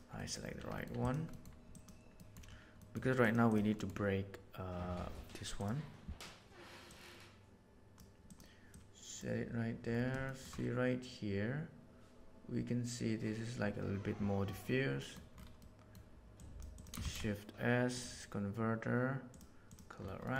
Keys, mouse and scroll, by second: 0.1 middle click, 0.8 middle drag, 1.0 click, 1.7 click, 2.8 middle click, 3.1 click, 3.5 click, 3.8 click, 7.0-7.9 drag, 8.2 drag, 8.6 click, 14.9 middle click, 15.7 middle click, 16.4 click, 16.7 click, 17.0 shift+a.